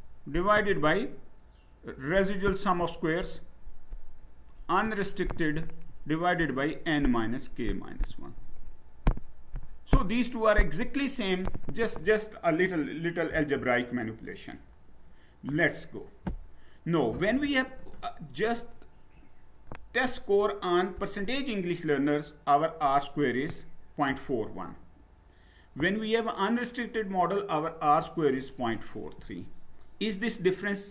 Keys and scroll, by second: 14.1 Down.